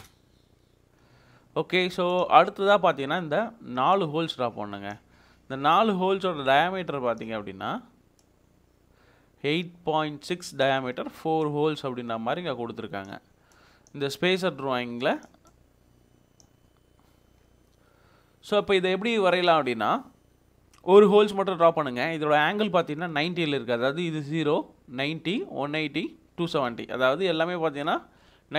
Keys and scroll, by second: 0.0 Return.